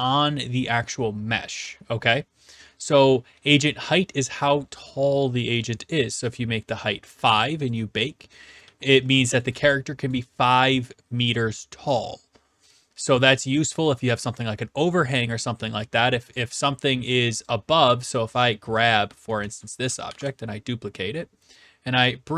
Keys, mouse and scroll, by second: 6.7 click, 7.7 click, 8.6-9.4 s, 9.4 right click, 9.6 q, 10.1 right click, 17.5 click, 18.4 click, 18.9 click, 19.4 e, 19.6 right click, 20.1 ctrl+d.